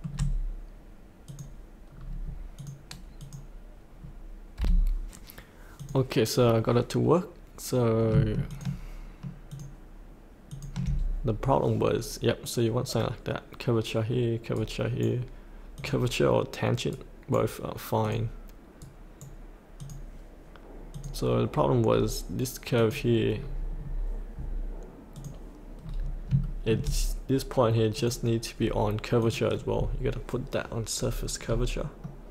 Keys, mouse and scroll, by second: 1.2 click, 1.9-2.6 scroll down 1, 2.6 click, 4.6 F8, 5.7 click, 8.5 ctrl+click, 9.5 ctrl+click, 14.5 right click, 15.7 click, 16.9 right click, 18.0 click, 18.8 right click, 19.8 click, 21.9-22.6 scroll up 1, 22.7 click, 23.3 scroll up 1, 23.7 scroll down 1, 25.1 click, 25.8-26.2 scroll down 1, 26.4 shift+middle click, 27.9 click, 30.9-31.5 scroll up 1, 32.0-32.3 middle drag.